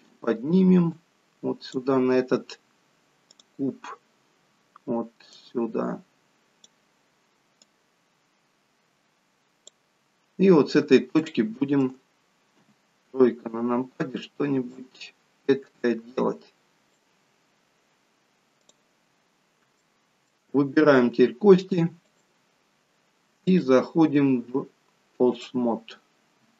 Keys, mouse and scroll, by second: 10.5-11.1 scroll up 3, 11.1 shift+middle click, 12.5 KP_3, 14.6 click, 18.8 click, 19.0-19.8 scroll up 3, 19.8 shift+middle click, 22.0 click.